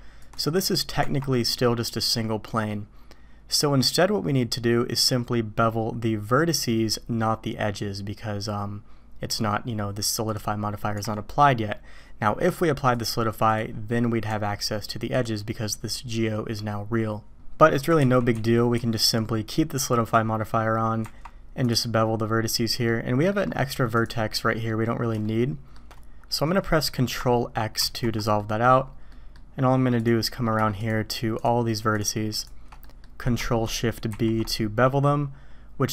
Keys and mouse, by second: 0.2 click, 1.0 Tab, 1.4-2.7 drag, 10.3 click, 10.9 Tab, 13.0-13.6 drag, 13.9 click, 14.3 Tab, 17.4 click, 18.0 ctrl+z, 18.3 ctrl+z, 18.8 ctrl+z, 20.1 click, 21.0 Tab, 22.4 click, 22.9-23.3 drag, 24.0 click, 25.2 shift+click, 25.7 shift+middle click, 27.8 ctrl+x, 28.4 drag, 29.1 drag, 30.0-30.6 drag, 31.4-32.4 shift+drag, 32.8 middle click, 34.1 ctrl+shift+b.